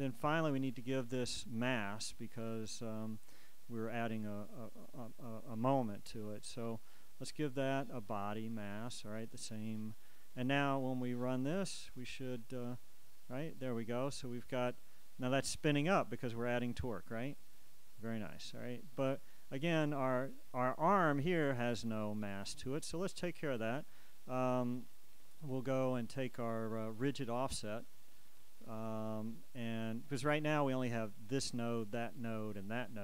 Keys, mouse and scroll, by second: 1.0 right click, 6.8 click, 8.2 click, 9.4 click, 11.7 click, 12.7 click, 17.4 click, 19.8 Escape, 28.9-33.0 drag.